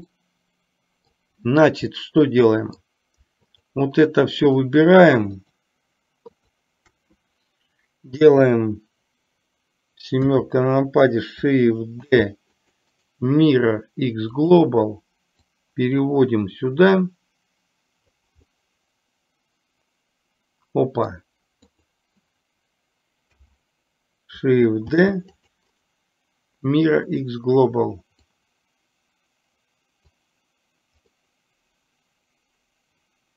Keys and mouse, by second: 0.2-1.2 middle drag, 2.1-2.9 middle drag, 3.6 shift+click, 5.4 shift+click, 6.4 shift+click, 12.2 shift+d, 12.9-14.7 right drag, 15.7-18.3 drag, 18.6-21.2 middle drag, 21.8 click, 25.8-27.4 right drag, 28.6-30.2 drag, 31.2-33.3 middle drag.